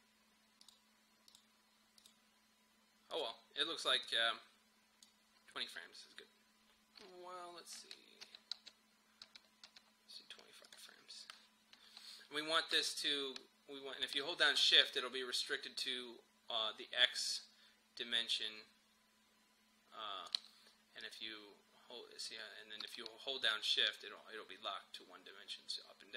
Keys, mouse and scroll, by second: 7.9 Page_Down, 10.7 click, 10.7-26.1 drag.